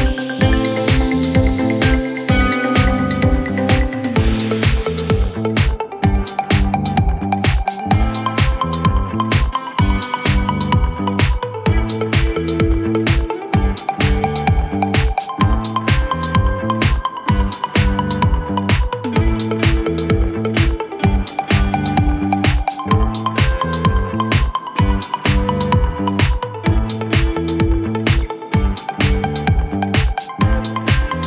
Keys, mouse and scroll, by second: 0.1 click, 1.5 click, 2.7 click, 5.1 click, 7.3 click, 7.9 click, 8.8 ctrl+d, 11.1 click, 13.1 s, 14.0 click, 14.4-15.2 typing, 16.0 click, 16.3-17.6 typing, 18.4 click, 18.8 click, 20.3 click, 20.7-21.6 typing, 23.0 click, 24.5 click, 26.6 click, 27.7 click, 27.8-28.7 typing, 29.8 click.